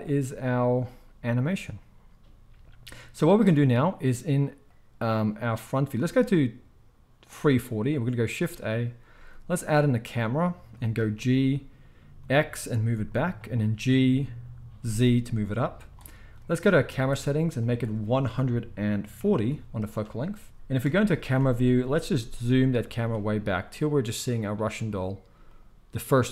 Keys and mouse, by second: 8.3 shift+a, 11.1 g, 13.2-17.6 middle drag, 13.8 g, 17.6-25.6 drag, 20.8 KP_0, 21.9 g, 25.6-26.3 middle drag, 25.9 g.